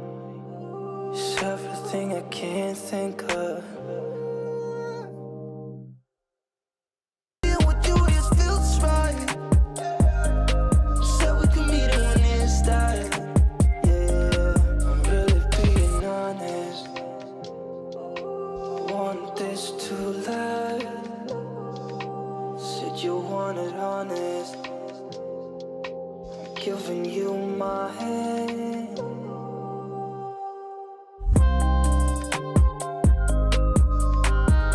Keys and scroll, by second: 7.4 ctrl+space, 10.5 ctrl+x, 16.0 ctrl+z, 17.7 ctrl+space.